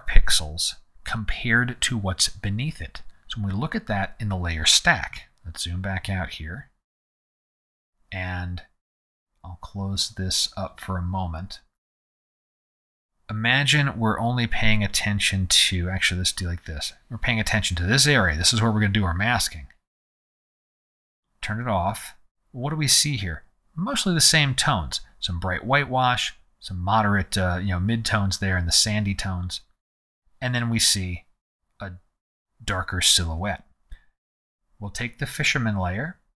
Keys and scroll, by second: 5.1 z.